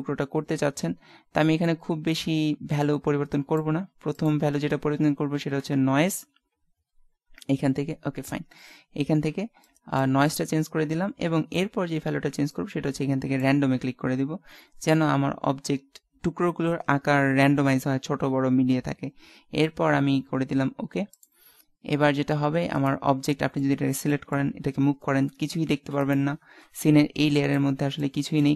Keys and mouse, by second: 23.3 middle click, 24.7 g.